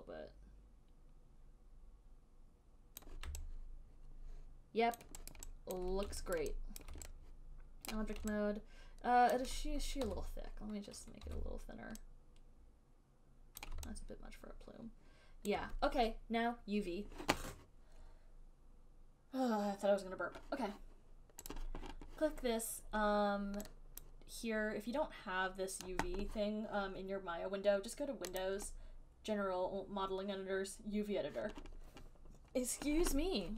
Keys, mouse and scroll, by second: 3.3 click, 5.2 alt+click, 5.6 alt+click, 6.1 alt+click, 6.6 alt+click, 7.1 alt+click, 7.5 alt+right click, 8.2 right click, 9.7 alt+right click, 10.3 w, 11.0 alt+click, 11.6 r, 13.9 click, 15.8 alt+click, 21.8-24.4 drag, 28.7 click.